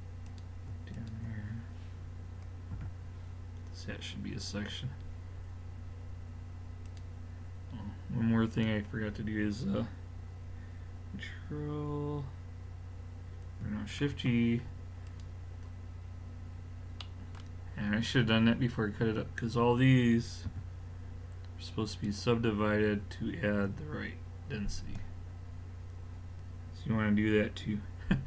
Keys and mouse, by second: 2.7 f, 4.9-6.9 middle drag, 6.9-10.3 drag, 14.0 shift+g, 20.5 w, 25.1-28.2 middle drag.